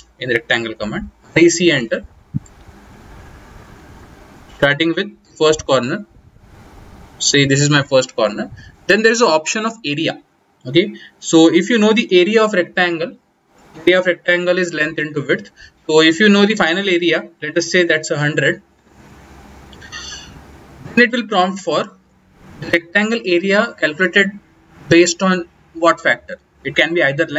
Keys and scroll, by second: 0.6-1.8 typing, 12.0 a, 12.5 Return.